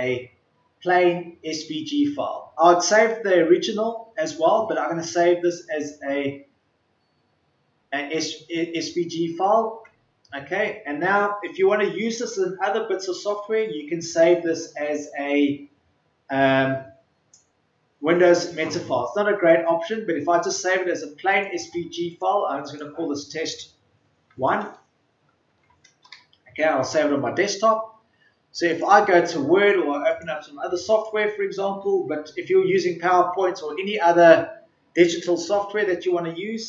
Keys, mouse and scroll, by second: 25.4 BackSpace, 26.0 Return.